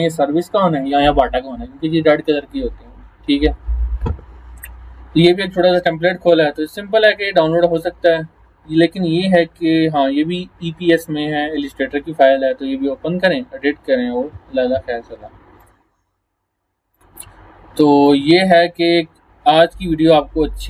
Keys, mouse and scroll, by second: 5.3 click, 6.1-7.9 scroll up 2, 9.6 scroll down 1, 12.4 scroll up 1, 15.6 click.